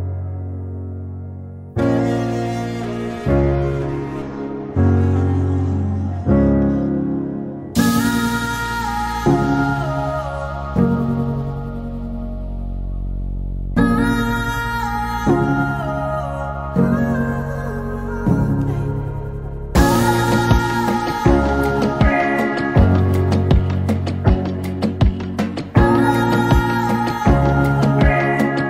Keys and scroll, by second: 3.9 p, 4.9 Delete, 8.9 m, 10.1-11.1 typing, 23.9 a, 26.5 m.